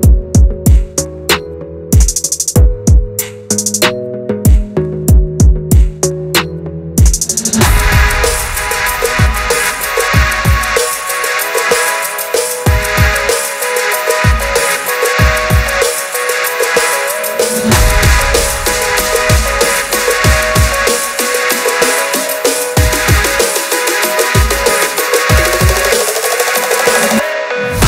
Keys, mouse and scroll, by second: 0.4 ctrl+2, 0.7 scroll up 2, 0.9 Tab, 1.5 ctrl+r, 2.4 3, 2.4 click, 2.6 g, 3.5 2, 3.8 alt+click, 4.0 g, 5.3 shift+z, 5.6 alt+click, 5.9 shift+z, 6.2 f, 6.4 g, 7.4 ctrl+b, 8.0 scroll up 4, 8.3 ctrl+z, 8.6 ctrl+z, 8.7 ctrl+z, 9.2 shift+z, 9.5 click, 9.9 click, 10.1 alt+click, 10.3 alt+click, 10.4 alt+click, 10.8 2, 11.0 alt+click, 11.4 shift+z, 11.6 click, 11.8 alt+click, 12.0 alt+click, 12.4 s, 13.2 ctrl+b, 15.1 g, 16.2 2, 16.4 alt+click, 16.7 g, 17.9-18.4 scroll down 2, 18.7 shift+z, 18.9 3, 19.0 click, 19.2 click, 19.8 click, 20.3 shift+z, 20.5 Tab, 21.1 Tab, 21.7 ctrl+r, 23.3 s, 24.0 Tab, 24.2 scroll down 2, 24.7 click, 24.9 scroll up 1, 25.0 Tab, 25.3 Tab, 25.4 click, 25.5 Tab, 25.9 ctrl+r, 26.8 ctrl+r, 27.3 s.